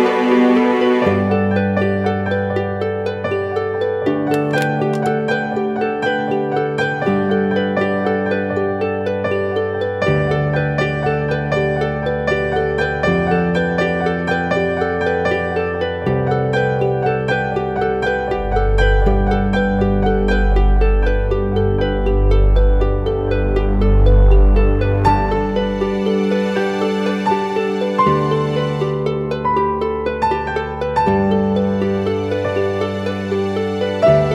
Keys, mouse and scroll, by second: 1.5 Return, 10.2 ctrl+t, 13.2 Return, 32.8 [, 33.0 [, 33.1 [, 33.4 [.